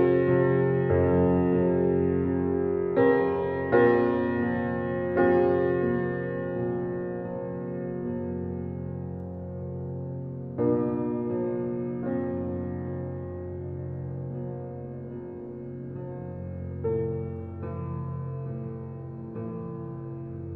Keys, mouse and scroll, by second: 1.9-2.4 scroll down 1, 2.6 click, 5.1-5.9 scroll down 1, 6.9 click, 9.4 click, 12.3 click.